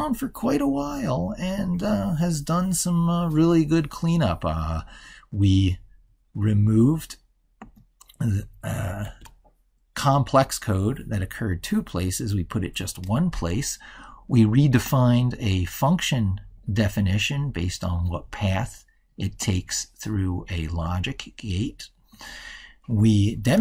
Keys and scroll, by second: 8.9 ctrl+s.